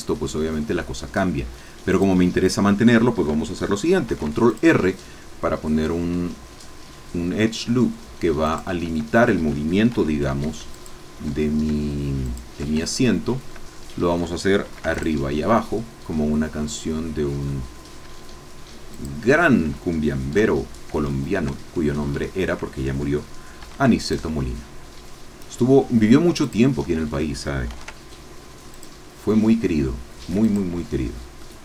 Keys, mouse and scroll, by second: 1.9 click, 4.0 ctrl+r, 4.5 ctrl+click, 8.4 shift+click, 9.9 ctrl+r, 10.7 shift+click, 12.3 shift+click, 12.8 shift+middle click, 13.7 shift+middle click, 14.7 ctrl+r, 15.0 ctrl+click, 18.9 shift+click, 21.0-22.2 shift+middle drag, 22.3 shift+middle click, 23.6 ctrl+r, 24.0 ctrl+click, 26.4 shift+click, 27.7 ctrl+r, 28.8 click, 30.4 ctrl+click, 30.9 ctrl+scroll down 1, 31.4 click.